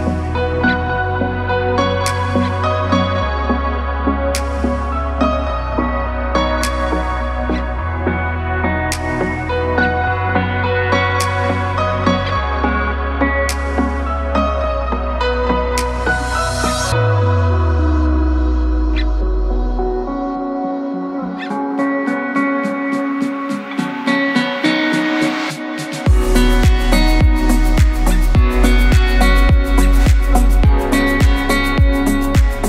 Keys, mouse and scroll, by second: 0.0 shift+click, 0.9 click, 2.0 shift+click, 2.6 shift+click, 4.3 shift+click, 4.9 shift+click, 6.1 shift+click, 6.7 shift+click, 7.3 shift+click, 8.3 shift+click, 8.7 KP_1, 10.5 i, 13.6 click, 14.6 KP_7, 15.9 click, 18.2 s, 22.0 KP_1, 23.3 click, 24.1-24.7 scroll up 2, 24.7 click, 25.7 KP_1, 26.8 i, 32.4 KP_7.